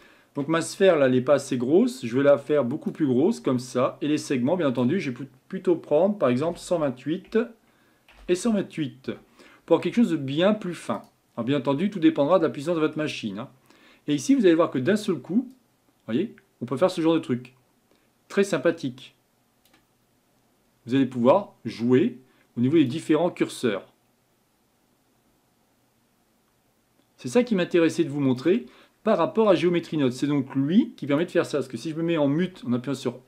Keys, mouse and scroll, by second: 11.4-12.4 scroll down 3, 15.6-18.5 drag, 21.0-27.4 drag, 28.7-29.1 scroll down 4, 32.4 m.